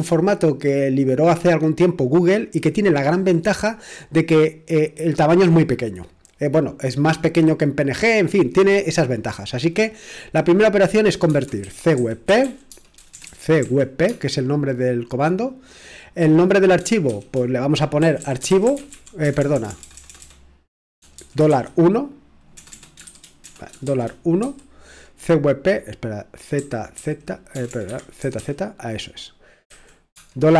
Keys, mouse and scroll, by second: 11.0-14.1 typing, 17.7-22.5 typing, 23.8-24.4 typing, 26.6-30.5 typing, 27.9 Escape.